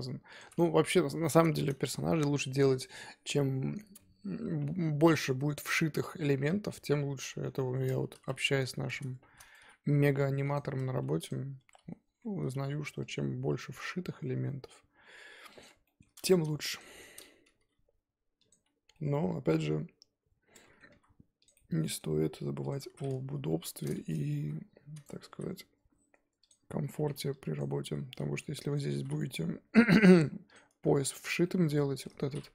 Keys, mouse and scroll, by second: 0.4 shift+click, 1.4 ctrl+z, 1.9 shift+click, 4.6 scroll down 3, 5.1-8.1 middle drag, 8.1 KP_1, 8.6-9.2 scroll up 4, 9.2 shift+d, 10.5 p, 11.0 Tab, 11.3 click, 11.6 Tab, 11.8 a, 13.1 alt+e, 15.9 shift+middle click, 16.0 scroll up 2, 16.2 2, 16.8 alt+click, 17.4 g, 18.8 scroll down 2, 18.9-20.8 middle drag, 20.8 scroll down 1, 20.9 3, 21.4 click, 21.5-22.7 middle drag, 22.7 shift+click, 23.0-23.5 scroll down 1, 23.5 KP_1, 24.4 g, 25.3 e, 26.6 scroll up 2, 26.6-28.9 typing, 27.6 click, 28.0 scroll down 1, 31.0 Tab, 31.2 scroll down 4, 31.4 middle click, 32.2-32.5 scroll up 2.